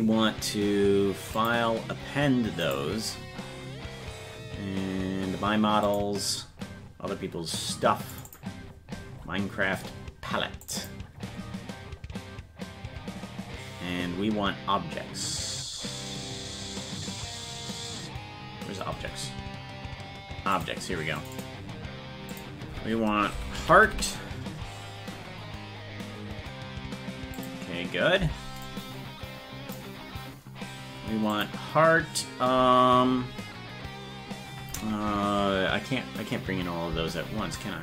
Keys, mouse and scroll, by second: 1.3-2.8 drag.